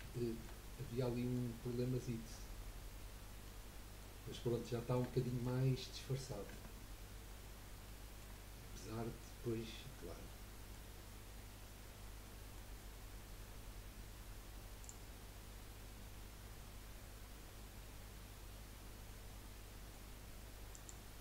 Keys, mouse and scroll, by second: 0.1-2.7 shift+middle drag, 2.7-3.4 scroll up 2, 3.4-5.7 middle drag, 5.7-6.5 scroll up 1, 6.5 Tab, 7.4 scroll down 1, 7.8-14.8 shift+middle drag, 14.8 click, 15.5-19.6 middle drag, 20.7 shift+click.